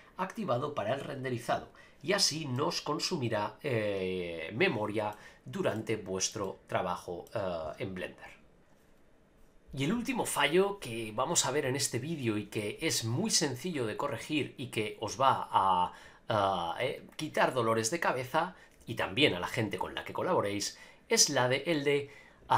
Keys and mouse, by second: 2.5-5.1 middle drag, 5.7-6.3 shift+middle drag, 6.4-7.3 middle drag.